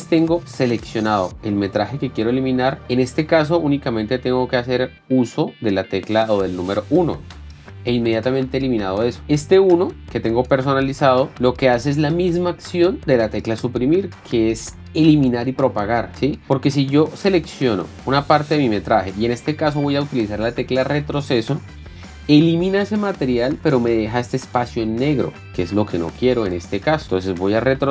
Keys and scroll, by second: 0.0-2.0 typing, 7.9 KP_1, 16.2-18.6 typing, 21.6 BackSpace, 22.3 Return, 27.0 k.